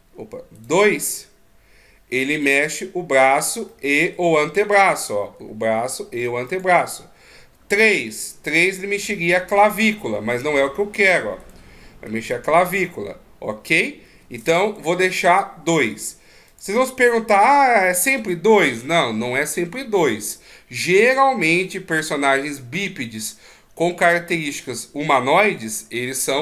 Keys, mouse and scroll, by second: 0.0 click, 0.9 right click, 1.4 right click, 2.8 click, 4.0 middle click, 5.0 right click, 5.7 g, 8.8 right click, 9.9 click, 11.4 right click, 12.4 g, 15.0 right click, 16.8 click.